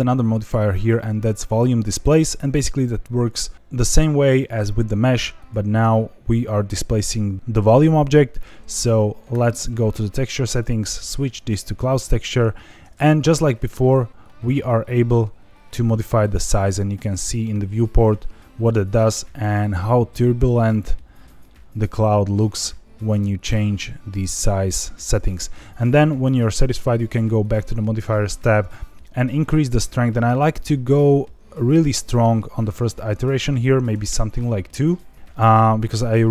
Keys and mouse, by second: 0.3-1.6 drag, 5.5 click, 10.6-11.6 drag, 14.3-17.3 drag, 18.0-18.7 middle drag, 19.6-25.0 drag, 27.4 click, 30.0-34.4 drag, 34.9 middle click, 35.3 middle click.